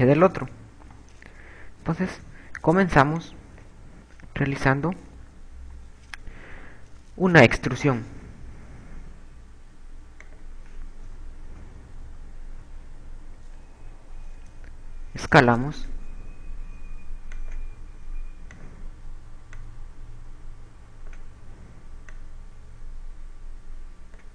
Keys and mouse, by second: 2.4 KP_4, 3.5 b, 5.3 KP_6, 5.8 KP_6, 8.3 e, 10.9 click, 11.3 KP_2, 12.4 KP_2, 12.7 KP_6, 13.0 KP_6, 15.4 s, 18.5 click, 19.7 click, 22.5 click.